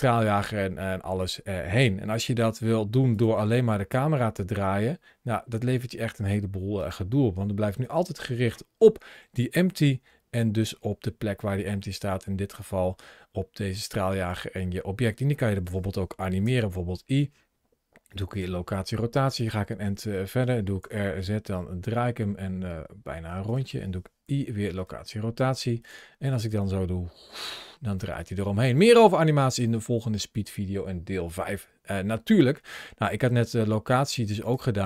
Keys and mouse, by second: 1.6 click, 3.4 r, 6.6 right click, 7.7 click, 9.7 r, 14.1 click, 16.3 i, 19.2 click, 20.7 r, 21.0 z, 23.3 click, 24.1 i, 26.2 space, 29.3 space, 34.2 click.